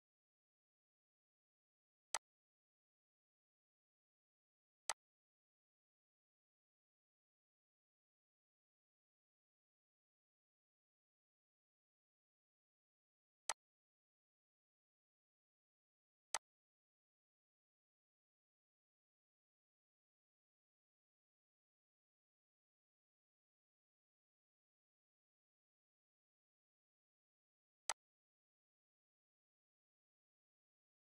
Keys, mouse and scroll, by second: 2.1 click, 4.9 click, 13.5 click, 16.3-26.3 drag, 27.9 click.